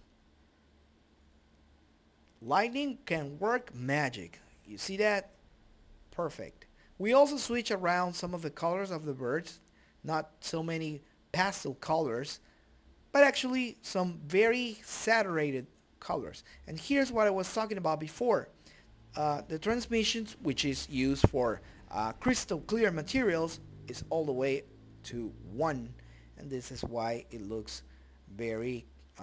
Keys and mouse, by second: 1.4-3.5 drag, 5.5 click, 8.0-9.1 middle drag, 12.3 middle click, 17.3-18.5 drag, 18.7 click, 19.3 click, 19.7 click, 21.3 click, 25.9 click.